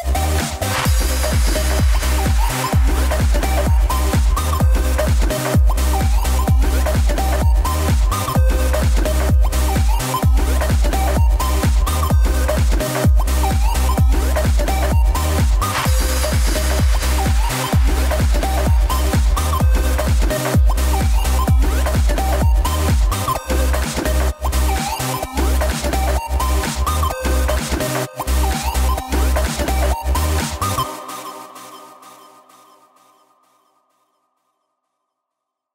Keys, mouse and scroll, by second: 9.4-14.5 drag, 14.5 s, 18.1 i, 19.2 click, 19.9-23.6 drag.